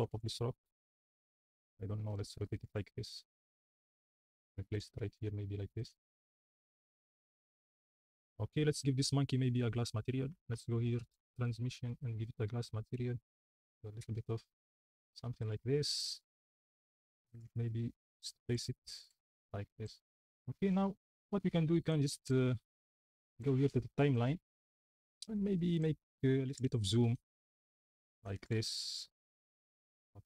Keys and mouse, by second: 0.0-6.6 typing, 9.8 click, 11.0 click, 14.3 click, 16.0 drag, 16.3 r, 17.4-19.4 typing, 20.6 click, 26.5 g, 26.6 y, 28.0 click, 28.5 g, 29.5 y.